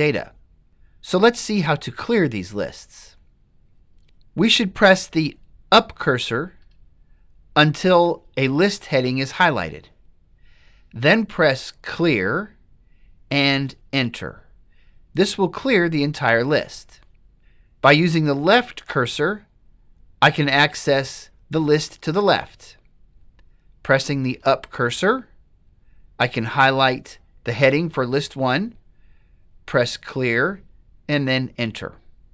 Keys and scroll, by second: 4.0 Up, 4.0 Down, 6.6 Up, 14.0 Return, 18.6 Left, 24.4 Up, 31.3 Return.